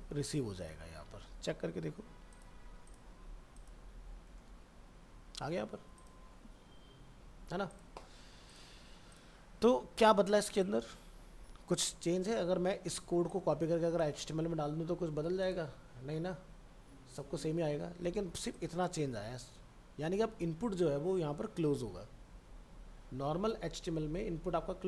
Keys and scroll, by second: 0.4 ctrl+a, 0.7 ctrl+v, 1.0 ctrl+s.